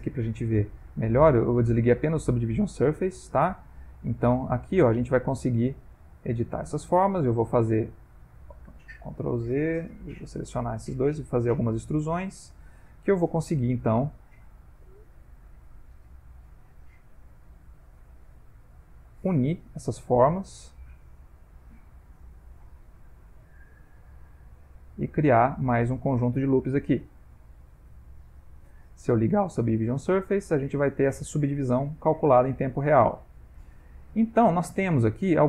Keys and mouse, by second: 0.0 ctrl+middle click, 1.3 click, 1.4 g, 4.2 click, 4.4 g, 5.3 click, 5.5 g, 6.7 shift+click, 7.0 e, 9.9 ctrl+z, 10.4 shift+click, 11.1 e, 12.9 shift+middle click, 13.5 middle click, 14.5 e, 16.2 r, 17.4 e, 18.7 r, 20.3 g, 21.9 e, 23.8 e, 26.4 ctrl+middle click, 27.1 middle click, 29.5 click, 30.2 ctrl+middle click, 31.9 middle click, 32.9 click, 33.1 g.